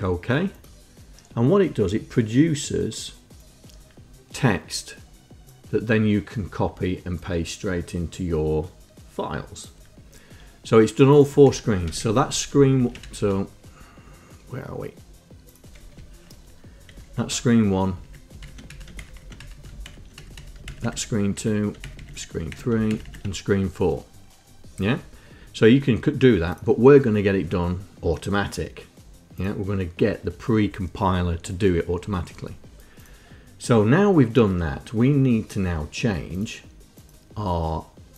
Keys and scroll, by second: 11.7 Up, 12.1 Home, 12.9 ctrl+shift+Down, 13.1 ctrl+shift+Down, 13.3 Up, 13.5 Up, 16.0 Home, 17.3 shift+Down, 18.2 Down, 18.3 Down, 18.9 Up, 19.2 shift+Down, 19.4 shift+Down, 19.6 Up, 20.1 shift+Down, 20.4 Up, 20.9 shift+Down, 21.1 shift+Down, 21.6 Down, 23.1 shift+Down, 23.3 shift+Down.